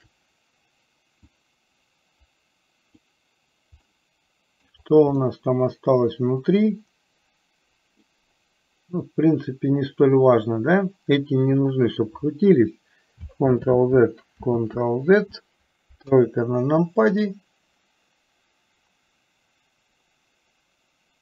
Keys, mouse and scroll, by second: 1.6-3.2 drag, 4.0 middle click, 5.6-8.3 middle drag, 13.7 ctrl+z, 14.6 ctrl+z, 16.2 KP_3, 17.3-21.2 middle drag.